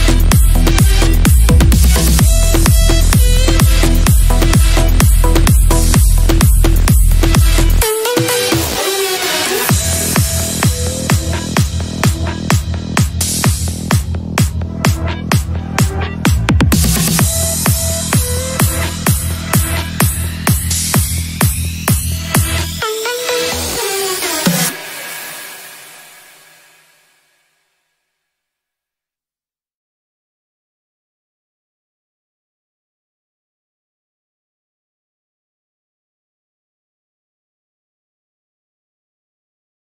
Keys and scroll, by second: 5.3 g, 5.9 F3, 9.3 shift+F2, 9.7 Escape, 10.4 F3, 10.6 Escape, 17.9 shift+F2, 18.1 Escape, 22.5 g, 31.7 Delete, 31.8 shift+F2, 32.0 Escape, 35.3 F9, 39.5 ctrl+s.